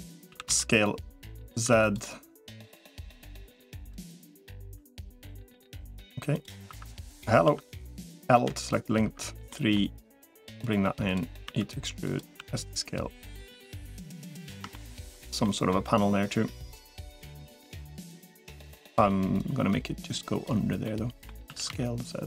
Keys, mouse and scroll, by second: 0.1 s, 1.9 3, 2.7 click, 3.9 1, 4.9 3, 6.9 1, 7.3 1, 8.3 l, 9.1 3, 9.4 middle click, 10.5 click, 11.3 e, 12.3 s, 14.0 middle click, 14.6 middle click, 15.3 middle click, 16.1-17.1 drag, 17.3 middle click, 17.9 click, 18.5 l, 19.3-20.3 drag, 20.7 middle click, 21.3 s.